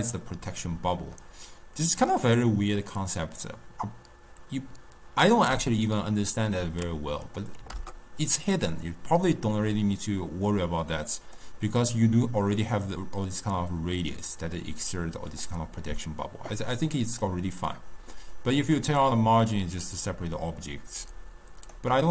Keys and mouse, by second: 1.2-4.3 middle drag, 7.3-10.3 drag, 11.4-14.5 drag, 17.3-20.3 drag, 22.0-22.1 drag.